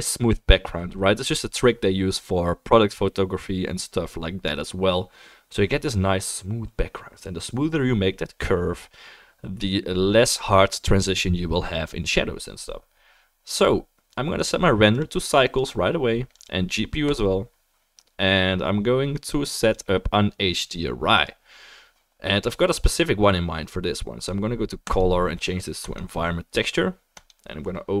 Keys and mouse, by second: 14.4 click, 14.4-28.0 middle drag, 15.0-19.7 drag, 24.9-28.0 drag.